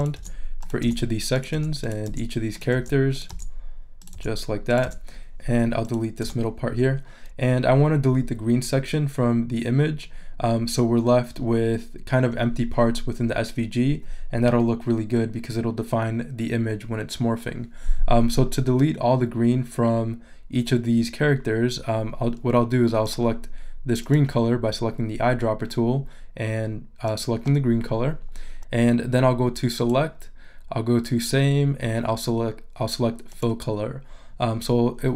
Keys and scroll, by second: 6.2 BackSpace.